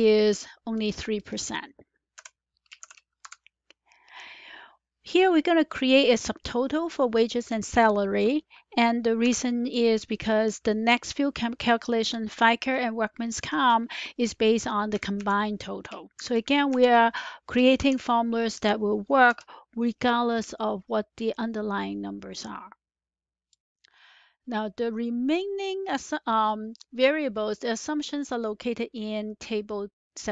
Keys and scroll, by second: 0.0-0.3 typing, 2.1 F4, 2.4-4.1 typing, 9.1 =, 16.1 Up, 17.7 Up, 18.5 BackSpace, 19.2 Return.